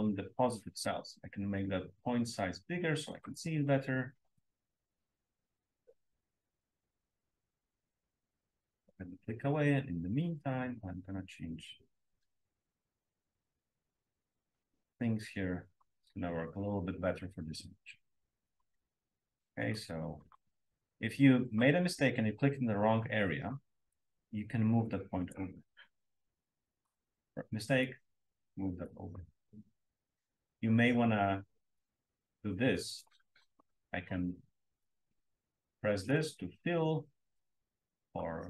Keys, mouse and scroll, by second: 1.5-3.2 drag, 4.6 click, 5.4 click, 6.3-6.6 drag, 7.1 drag, 8.0 drag, 8.8 drag, 10.4 click, 12.4 click, 13.7 click, 19.5 click, 20.1 click, 21.4 click, 23.2-25.1 scroll up 1, 23.9-25.5 drag, 25.1-26.8 scroll up 1, 26.7 click, 27.8-29.0 drag, 30.2-32.8 scroll up 1, 32.8 click, 36.0 click, 36.5 click, 37.0 click, 37.5 click, 37.9 click.